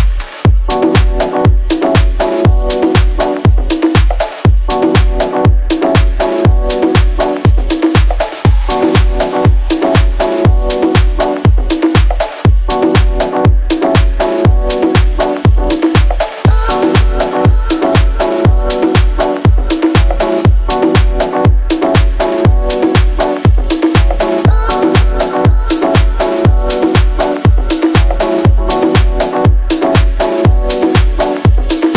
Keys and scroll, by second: 11.0-12.3 typing, 13.6 shift+u, 24.1 ctrl+l, 25.5 ctrl+l.